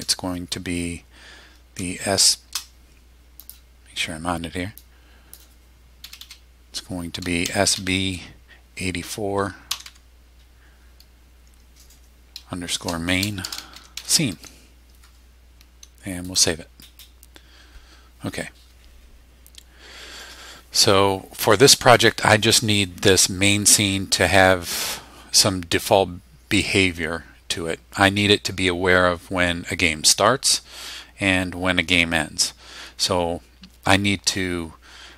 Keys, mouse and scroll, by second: 1.8 shift+s, 3.4 click, 4.8 click, 6.0 Delete, 7.4 shift+s, 7.7 shift+b, 9.5-10.3 typing, 12.7-14.5 typing, 16.3 click.